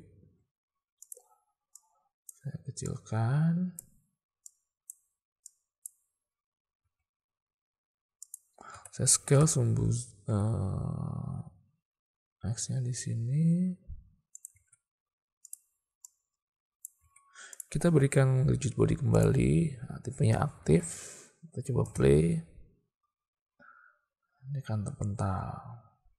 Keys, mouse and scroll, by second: 0.3 s, 1.8-2.4 drag, 2.9-3.9 drag, 4.5-5.0 drag, 5.5 click, 6.9 s, 8.8 s, 14.6 alt+a, 15.5 click, 16.1 click, 17.1 alt+a, 19.3 click, 20.7 alt+a, 21.9 space.